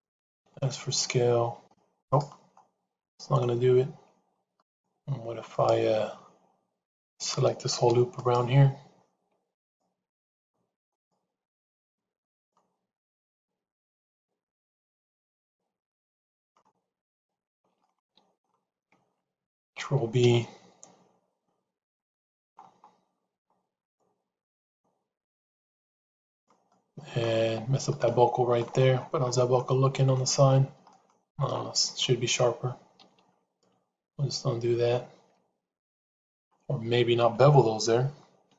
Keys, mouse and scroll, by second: 0.3 s, 2.4 middle click, 4.6 click, 5.4 click, 8.2 alt+click, 9.4 alt+shift+click, 10.8 alt+shift+click, 11.6 alt+shift+click, 12.2 shift+click, 13.1 shift+click, 13.9 shift+click, 15.2 shift+click, 17.8 middle click, 19.7 ctrl+b, 26.7 middle click, 27.3 Tab, 27.8 middle click, 29.5 middle click, 30.8 middle click, 33.8 ctrl+z, 34.0 ctrl+z.